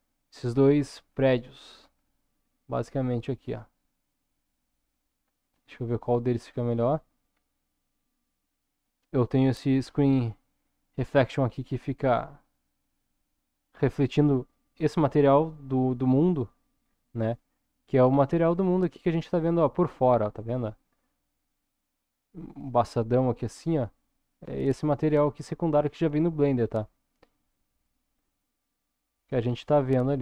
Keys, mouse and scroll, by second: 0.6 shift+middle click, 1.5-2.0 shift+middle drag, 2.4 scroll down 1, 3.2-4.8 middle drag, 5.3-5.6 middle drag, 6.0-7.0 shift+middle drag, 7.3-7.8 scroll up 1, 8.9-9.4 middle drag, 9.6-10.2 shift+middle drag, 11.2-12.5 middle drag, 16.8-17.3 scroll down 2, 17.3-23.4 middle drag, 25.5-26.5 middle drag, 26.7-27.0 scroll down 2, 27.1-28.7 middle drag, 29.4-30.2 scroll up 3.